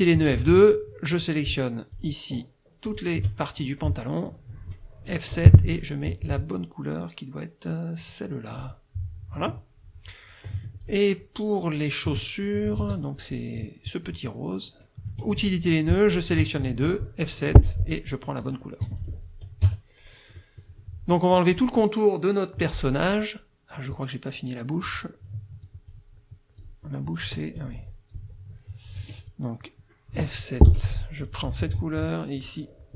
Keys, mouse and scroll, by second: 0.2 F2, 1.2 click, 2.0 shift+click, 2.9 shift+click, 5.4 F7, 8.6 click, 9.4 F1, 10.6 F2, 10.8 click, 12.1 F1, 12.2 click, 12.8 ctrl+z, 15.1 F2, 16.2 shift+click, 17.6 F7, 18.4 click, 19.0 F1, 19.0 click, 19.6 KP_Subtract, 20.4 middle click, 24.9 click, 25.6 click, 26.6 click, 27.6 ctrl+z, 29.0 F2, 29.2 click, 30.7 F7, 31.3 click, 31.7 F2, 32.4 click.